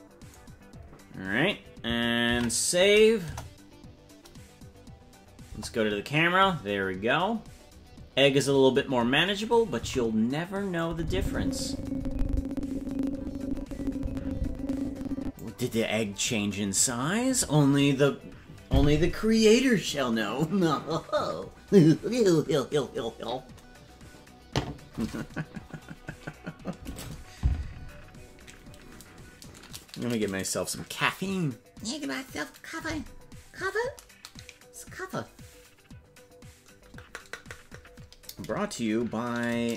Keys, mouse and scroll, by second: 4.5 ctrl+s, 4.5 KP_0, 5.5 KP_0, 6.5-7.3 scroll up 5, 7.9-8.8 scroll down 1, 9.9 Left, 10.8-15.4 drag.